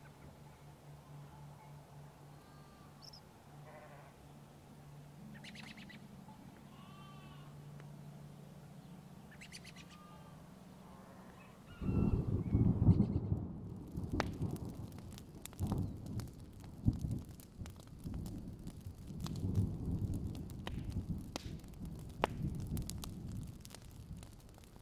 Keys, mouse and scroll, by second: 1.4-3.0 drag, 3.9-4.3 alt+scroll down 2, 4.5 click, 5.4-5.7 alt+scroll up 1, 5.7 click, 6.3 alt+scroll down 1, 6.5 click, 6.9 alt+scroll down 1, 7.4 alt+click, 8.3 shift+click, 9.0 alt+scroll up 1, 9.2 click, 10.2-12.0 alt+scroll down 2, 12.1 alt+scroll down 1, 12.7 click, 13.5-15.9 alt+drag, 16.3 alt+scroll down 1, 16.8-18.5 alt+scroll up 3, 18.5 right click, 18.8 click, 19.0 alt+scroll up 1, 19.3-24.6 drag, 24.7 click.